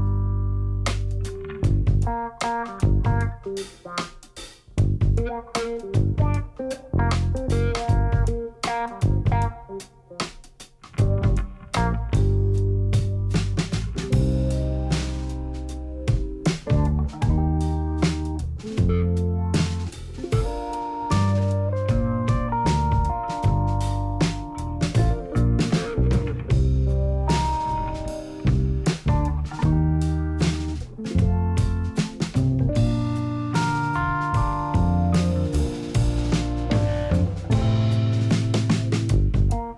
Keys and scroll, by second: 6.9 1, 7.4 shift+z, 14.6 Tab, 19.6 1, 25.5 g, 26.0 z, 31.3 shift+z, 33.4 Tab.